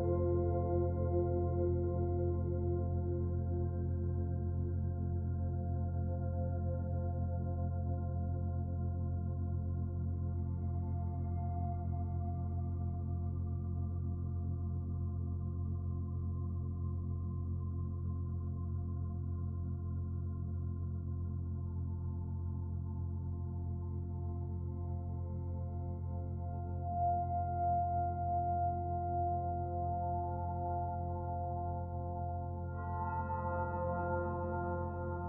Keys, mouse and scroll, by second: 0.6 click, 7.8 click, 9.2 middle click, 10.0 Tab, 10.4-10.7 scroll down 1, 10.7 middle click, 11.3-11.8 scroll up 1, 11.9 middle click, 12.6 middle click, 14.7 click, 20.0 click, 21.8 right click, 22.6 middle click, 26.8 click, 29.2 click, 30.3 click, 32.1 click, 35.1 middle click.